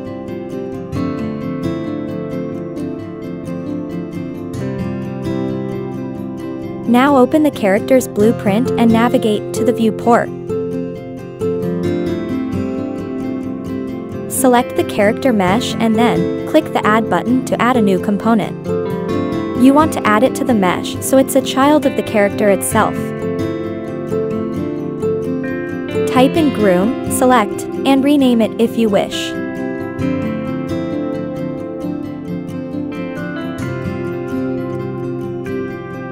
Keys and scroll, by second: 0.2 Return, 10.2 Delete, 20.9-22.8 typing, 29.4-31.5 typing, 34.2 1.